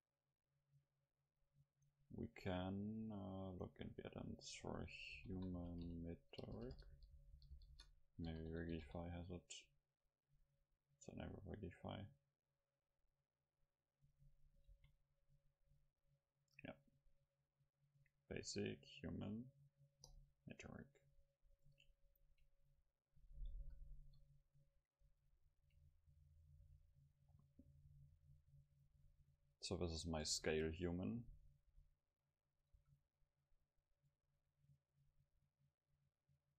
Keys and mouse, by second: 14.7 shift+a, 20.9-23.6 middle drag, 23.6 KP_5, 24.1 KP_5, 24.9-26.0 middle drag, 26.2 middle click, 26.4 middle click, 26.7 s, 28.9 click, 29.1 middle click, 29.6-30.8 drag, 30.4 s, 30.8 middle click, 31.4 middle click, 31.7 s, 32.7-34.7 drag, 32.8 a.